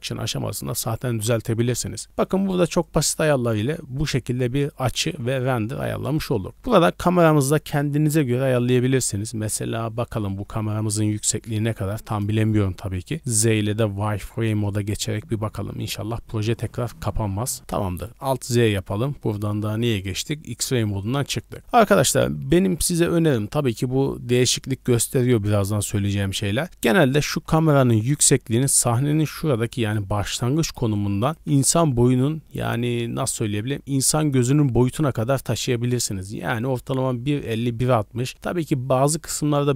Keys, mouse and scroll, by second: 0.4 t, 2.8 click, 9.7-10.5 scroll down 5, 9.9 middle drag, 10.4 scroll up 1, 11.1 scroll down 1, 11.1 KP_1, 11.7 z, 18.9-19.5 scroll up 3, 19.2 shift+middle drag, 21.1 right click, 22.1-22.5 shift+middle drag, 26.7 scroll up 1, 26.9 scroll down 1, 27.2 g, 30.4 click, 30.8 d, 30.9 right click, 30.9 d, 31.3 g.